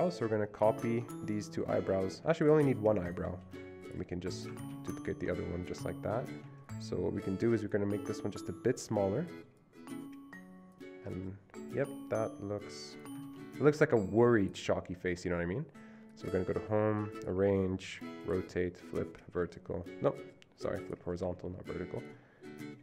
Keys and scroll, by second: 3.5 ctrl+c, 4.7 ctrl+v, 13.3 ctrl+d.